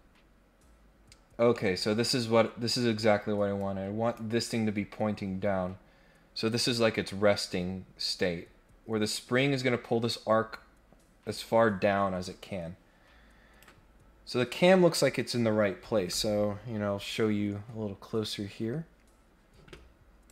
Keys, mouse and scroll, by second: 1.1 scroll down 1, 1.5 middle click, 2.0 scroll down 1, 2.3-3.0 scroll up 3, 3.0 middle click, 3.5 click, 5.3-5.8 scroll down 2, 7.6 scroll down 2, 8.0 scroll up 2, 9.0-13.6 drag.